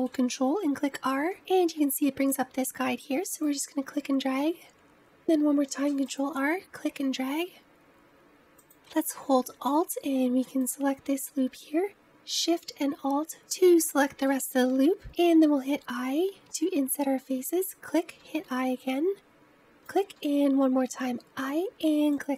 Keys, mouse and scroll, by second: 1.1 ctrl+r, 5.1 middle click, 5.5 ctrl+r, 8.6-10.6 scroll down 1, 10.6 alt+click, 13.3 alt+shift+click, 15.3 i, 18.1 i, 20.1 i.